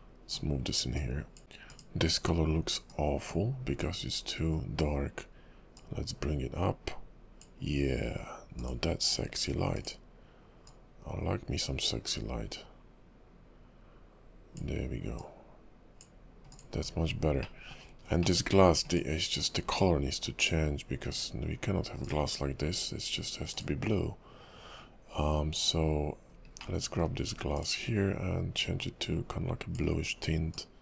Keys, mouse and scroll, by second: 16.5 click, 17.0-17.6 scroll down 6, 17.6 middle click, 18.0-18.5 scroll up 4, 18.5 middle click, 18.9 click, 19.8 scroll down 2.